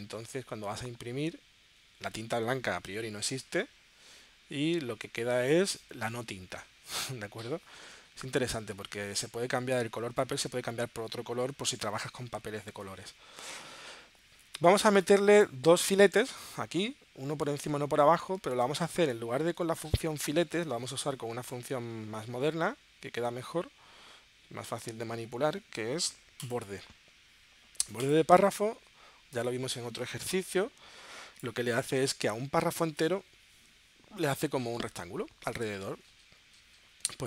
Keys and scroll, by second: 16.3 super+Tab, 18.8 super+Tab.